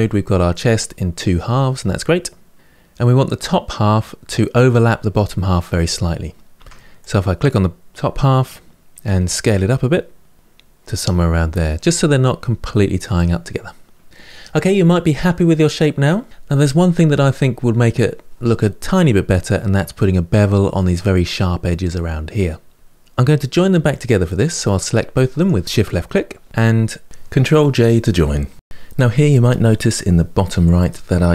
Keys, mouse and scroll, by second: 0.3-3.4 middle drag, 6.3 Tab, 6.7 click, 10.3-12.7 middle drag, 12.8-14.1 middle drag, 14.3-16.3 middle drag, 21.4-22.7 middle drag, 25.1 shift+click, 27.7 j.